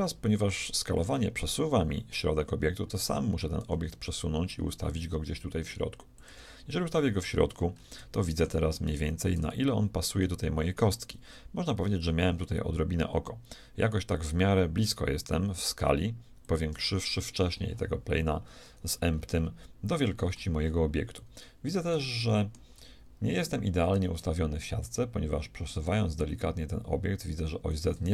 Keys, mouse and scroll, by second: 3.6 g, 6.6-7.7 middle drag, 7.7-8.1 scroll down 1, 8.1 shift+middle click, 9.4 g, 18.7 middle click, 23.9 g.